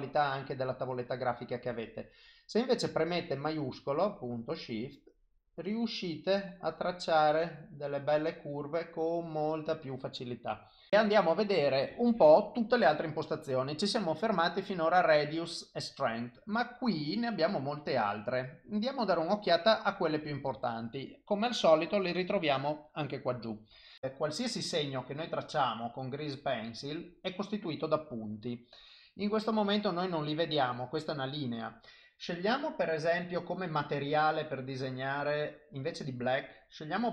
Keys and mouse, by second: 3.4 shift+click, 17.3 click, 18.4 click, 21.9 click, 25.1 click, 32.5 click, 35.9 click.